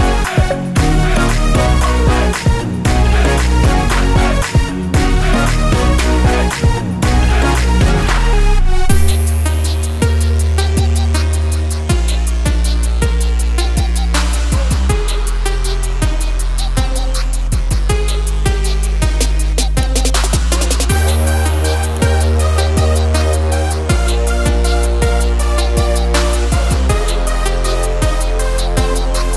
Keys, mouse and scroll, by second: 0.7 click, 2.8 click, 3.3 F4, 3.7 click, 5.6 F9, 6.5 click, 6.7 double click, 7.1 scroll up 1, 7.5 scroll down 1, 7.8-8.3 scroll up 1, 8.6 ctrl+click, 10.4 F8, 11.1 ctrl+a, 11.4 f, 12.4 click, 12.6 double click, 13.9 click, 14.7 h, 15.7-16.2 scroll down 1, 16.6 ctrl+z, 17.4 click, 17.6 double click, 18.4 click, 18.6-19.0 scroll down 1, 19.0 scroll up 1, 19.5 ctrl+z, 20.7 scroll down 1, 20.9 scroll up 1, 21.4 ctrl+click, 24.5 scroll down 1, 25.6 scroll up 1, 26.2 double click, 26.6 click, 27.3 ctrl+o, 28.1 scroll down 1, 29.0 click.